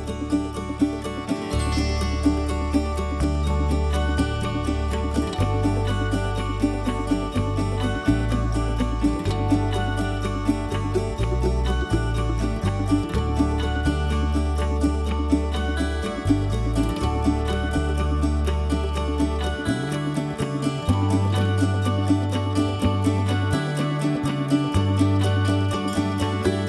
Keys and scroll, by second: 0.0 ctrl+alt+v, 7.1 ctrl+i, 9.3 ctrl+i, 10.5 ctrl+i, 12.0 alt+i, 14.6 alt+i, 19.5 ctrl+z.